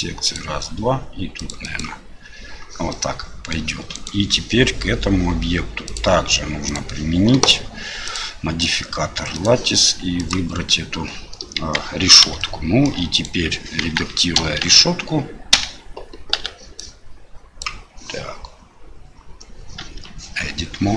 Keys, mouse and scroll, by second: 2.9 middle click, 3.9 right click, 5.8 click, 6.7-8.1 drag, 9.4 click, 11.6 KP_1, 12.4-12.8 ctrl+shift+middle drag, 13.1 right click, 13.8 KP_1, 14.6 `, 16.3 1, 16.9-17.6 drag, 19.8 Tab.